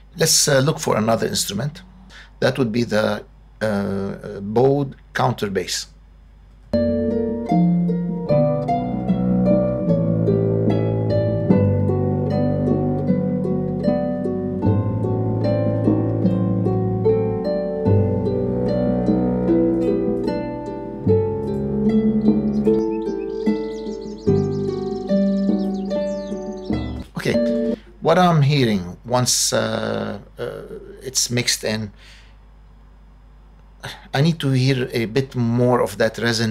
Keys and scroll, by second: 6.5 space, 26.8 space.